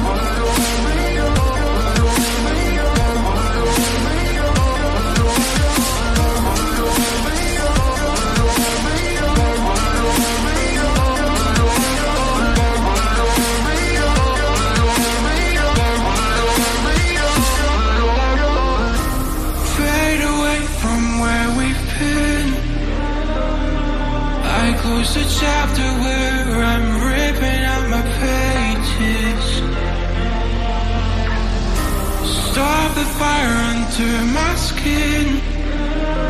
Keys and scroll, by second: 1.4-6.5 typing, 12.4 m, 12.5 ctrl+a, 14.0 ctrl+a, 15.5 ctrl+d, 19.1 ctrl+d, 24.3 ctrl+a, 34.5-36.2 typing.